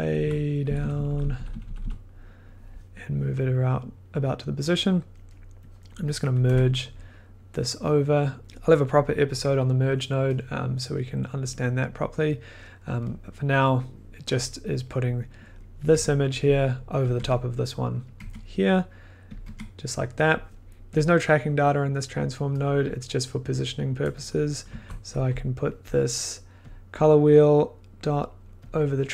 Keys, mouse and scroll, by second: 0.2 Left, 0.6 Down, 0.6-3.0 drag, 0.8 Down, 0.9 Down, 1.0 Down, 1.1 Down, 1.3 Down, 1.5 Down, 1.6 Down, 1.7 Down, 4.0 click, 4.8 middle click, 5.8 click, 6.1 click, 6.5 m, 6.9 middle click, 7.3-7.7 scroll, 7.7 click, 8.4 scroll, 8.4 f, 8.6-10.5 middle drag, 11.4 click, 11.5 middle click, 12.3 click, 12.4 middle click, 12.7 middle click, 14.3 click, 15.9 1, 17.1 click, 17.2 1, 18.1 click, 18.2 1, 19.2 click, 19.4 1, 20.7 ctrl+z, 22.1 click, 22.8 click, 24.2 click, 24.7 Left, 25.1 Down, 27.9 click, 28.6 click.